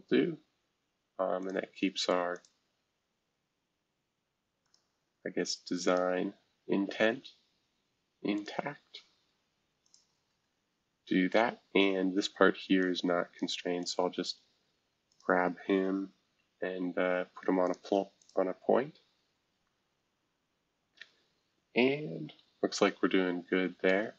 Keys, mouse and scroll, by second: 1.4 click, 2.3 click, 4.6 click, 5.8 click, 7.1 Escape, 8.3 click, 8.8 scroll down 1, 9.8 shift+click, 10.3 e, 12.8 click, 13.8 click, 15.1 shift+click, 17.6 click, 18.2 click, 19.0 scroll down 3, 19.8 scroll down 2.